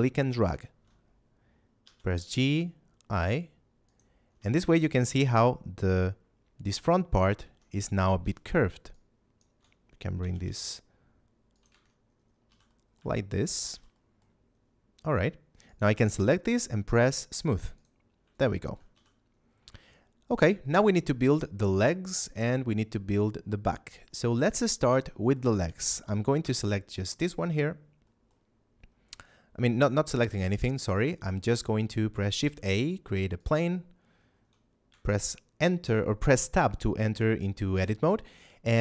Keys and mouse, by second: 1.7 g, 2.1 y, 3.8 click, 4.6 Tab, 8.1 a, 8.9 ctrl+click, 10.1 g, 10.4 y, 11.5 click, 11.6 Tab, 12.4 a, 12.6 middle click, 13.1 shift+middle click, 13.6 z, 13.9 middle click, 15.6 right click, 17.7 click, 18.5 shift+middle click, 18.9 a, 19.8 shift+middle click, 20.5 middle click, 24.0 shift+middle click, 26.3 KP_7, 28.0 middle click, 32.2 shift+a, 33.3 click, 34.8 Tab, 37.4 middle click.